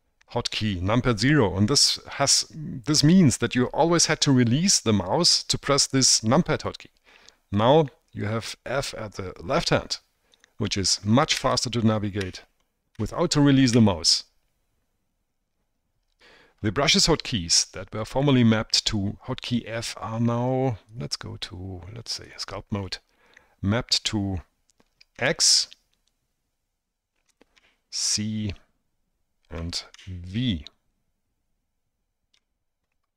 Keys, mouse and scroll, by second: 10.5 click, 10.8 click, 10.8 right click, 10.8 middle click, 10.9 click, 10.9 right click, 11.5 f, 11.9 click, 12.0 middle click, 12.1 click, 12.3 f, 12.7-13.0 drag, 13.1 f, 13.5 click, 13.7 middle click, 13.9 f, 21.1-22.5 drag, 23.0 middle click, 25.3 x, 27.7 c, 30.1 v.